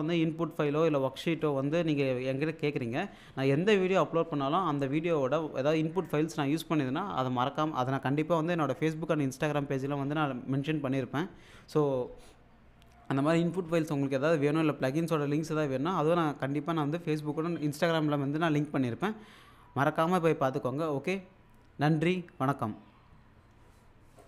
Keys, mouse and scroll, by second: 24.2 click.